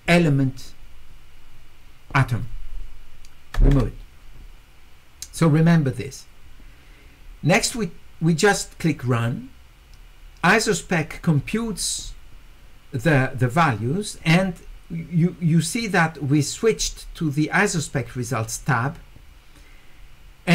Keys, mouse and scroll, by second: 9.1 click.